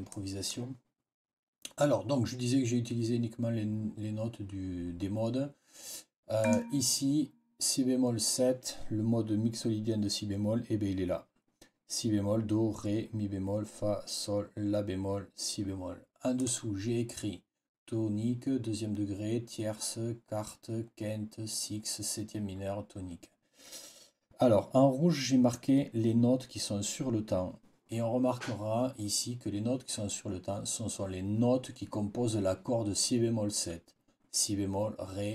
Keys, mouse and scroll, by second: 0.0 click, 6.3 click, 16.3 click.